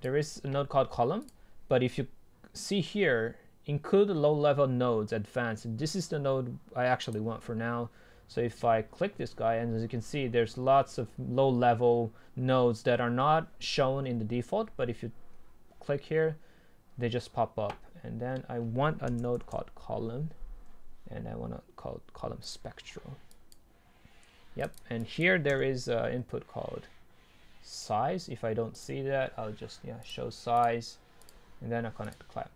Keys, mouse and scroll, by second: 0.0-2.1 drag, 9.6-10.1 scroll down 2, 10.1-11.7 scroll up 2, 11.7-13.3 scroll down 2, 13.3-13.8 scroll down 1, 14.0 scroll down 1, 14.3-16.4 scroll up 2, 16.4 scroll up 1, 17.0-18.6 scroll down 2, 18.6-19.0 scroll down 1, 22.7-25.6 drag, 25.6 Delete.